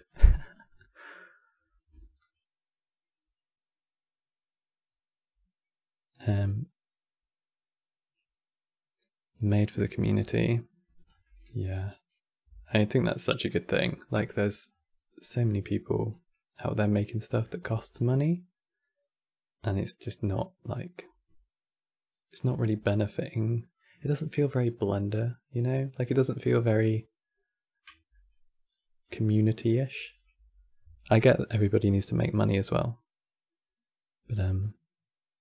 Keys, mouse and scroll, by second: 0.5-0.8 middle drag, 0.8-1.2 scroll up 4, 1.2 middle click, 1.9-4.9 shift+drag, 9.9 scroll down 4, 10.1-10.8 middle drag, 10.8 scroll down 3, 10.9 middle click, 11.5 click, 12.2 g, 13.2-14.4 middle drag, 14.4 scroll up 4, 15.1-15.8 middle drag, 15.8-17.0 drag, 17.0 middle click, 17.6-20.6 shift+drag, 22.3-23.4 middle drag, 23.4 click, 27.4 middle click, 28.3 click, 28.7 click, 29.2 click, 30.8-31.9 middle drag, 31.9-35.0 drag.